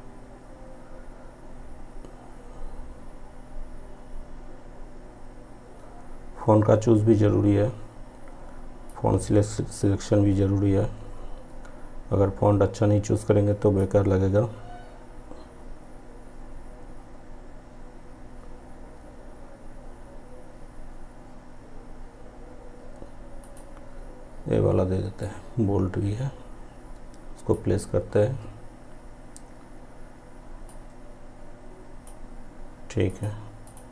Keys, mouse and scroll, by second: 8.9-30.8 drag, 30.8-33.9 drag.